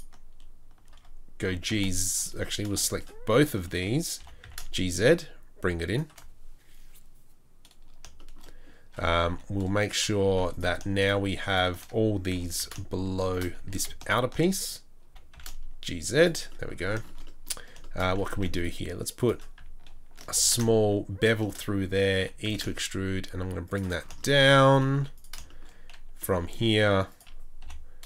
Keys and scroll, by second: 4.1 g, 9.3 3, 12.4 g, 13.6 2, 15.1 g, 18.3 ctrl+r, 20.3 ctrl+b, 22.2 e, 24.9 3, 26.2 s, 27.6 i.